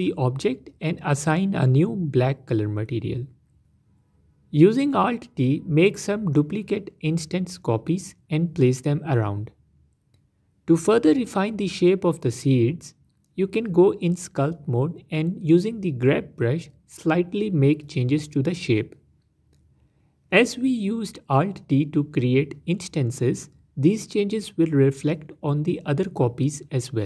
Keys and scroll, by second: 1.8 BackSpace, 2.4 e, 5.5 alt+d, 6.9 alt+d, 8.9 s, 9.8 s, 10.3 alt+d, 14.6 Tab, 16.8 g, 17.0 f, 22.2 Tab.